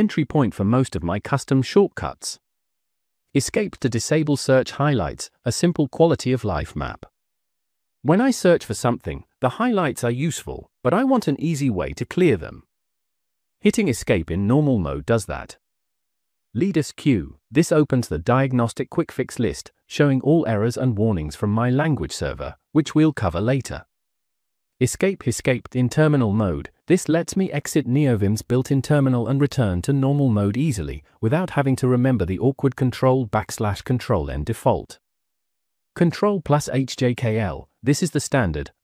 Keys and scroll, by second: 0.0 Escape, 3.0-5.1 typing, 7.6 shift+v, 9.2 Escape, 11.2-12.3 typing, 12.6 Return, 14.2 Escape, 15.5 j, 15.9 j, 16.2 j, 21.3-22.2 typing, 23.7 k, 24.0 k, 24.2 k, 25.2 shift+v, 26.5 Escape, 28.1-30.0 typing, 30.1 Tab, 31.8 i, 32.6 l, 32.7 l, 33.0 BackSpace, 33.3 Return, 34.5 Escape.